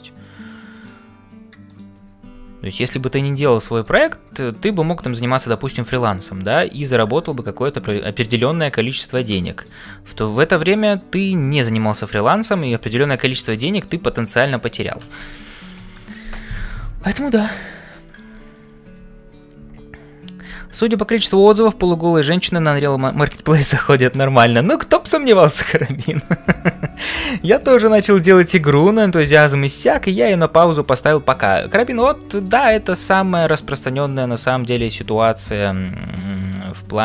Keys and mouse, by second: 0.0-37.0 typing, 0.2 middle click, 1.7 click, 6.1 click, 9.5 shift+right click, 16.0 ctrl+s, 17.2 shift+middle click, 32.1 shift+middle click, 32.9-34.7 middle drag, 35.2 shift+middle click, 36.0-37.0 middle drag.